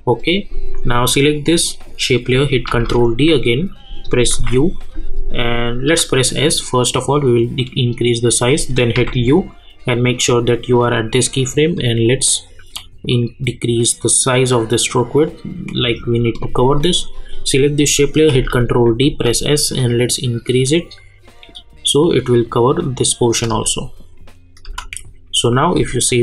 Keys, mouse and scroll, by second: 2.7 ctrl+d, 4.3 u, 5.9 s, 6.5-8.6 drag, 9.0 u, 11.7-17.4 drag, 18.3 ctrl+d, 19.0 s, 19.7-23.5 drag, 23.5 space, 25.4 click, 25.7 space.